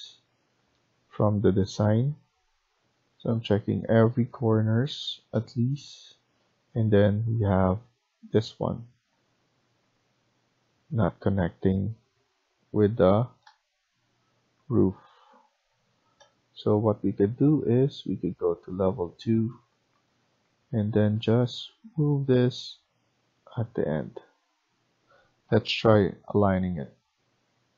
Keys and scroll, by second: 7.3 Escape, 25.5-25.9 typing.